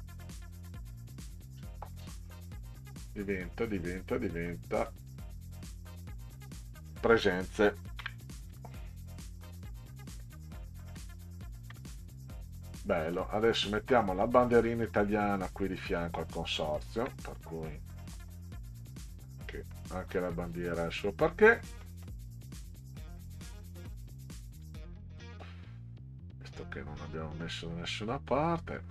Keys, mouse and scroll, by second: 0.4 click, 1.1-1.7 scroll up 4, 3.1 click, 4.9 click, 5.1 click, 8.0 Caps_Lock, 8.5-11.3 typing, 11.7 Return, 12.6-13.2 middle drag, 13.5 middle click, 14.0 middle click, 14.7 middle click, 16.1 middle drag, 16.8 ctrl+scroll down 2, 18.5 middle click, 19.8 middle click, 20.4-21.1 drag, 21.8 middle click, 22.7-23.8 drag, 25.2-28.5 ctrl+drag.